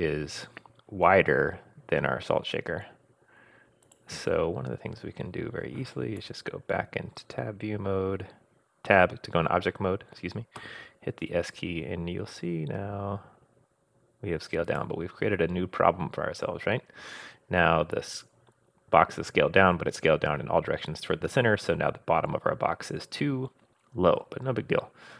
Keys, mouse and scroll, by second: 1.5-1.9 scroll up 1, 3.8 click, 6.2 Tab, 10.6 s, 15.3-16.2 scroll up 2, 16.2-17.3 scroll up 1, 17.5-19.9 scroll down 3.